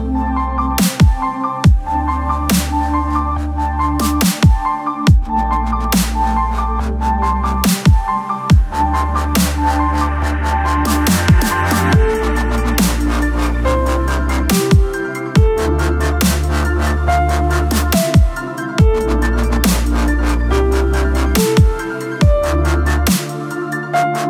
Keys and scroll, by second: 8.6 s.